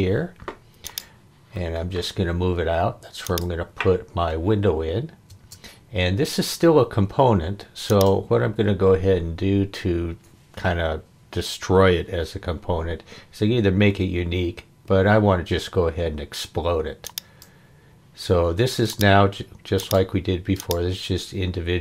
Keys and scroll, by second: 5.3 space.